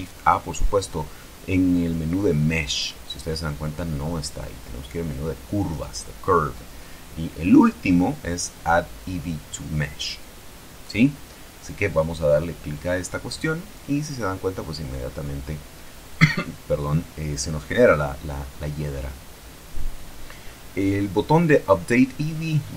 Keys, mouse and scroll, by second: 0.2 shift+a, 13.2 click, 14.8-17.5 drag.